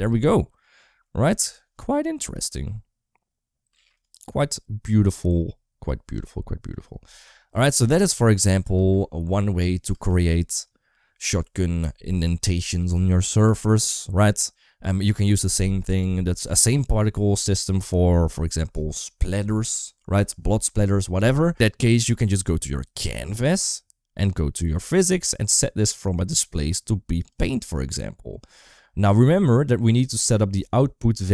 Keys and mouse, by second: 0.1 middle click, 0.9 middle click, 2.2 click, 2.4 space, 3.5 space, 3.8 click, 6.7 click, 8.4 click, 8.7 space, 9.8 space, 10.8 middle click, 24.5 click, 26.3-27.3 drag, 30.0 click.